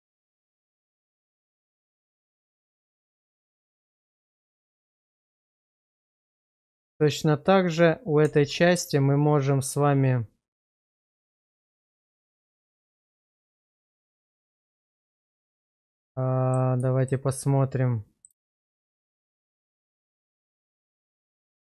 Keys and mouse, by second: 2.4 shift+z, 2.8 shift+middle drag, 3.3-3.9 middle drag, 4.4 shift+middle drag, 5.0-6.7 middle drag, 8.2 Tab, 11.1-12.3 middle drag, 12.6 shift+z, 13.1 shift+middle click, 13.8-15.0 middle drag, 15.3 shift+middle click, 15.7 middle click, 17.0 shift+middle click, 17.3 middle click, 18.5 shift+middle click, 20.3 shift+middle click, 20.8-21.7 middle drag.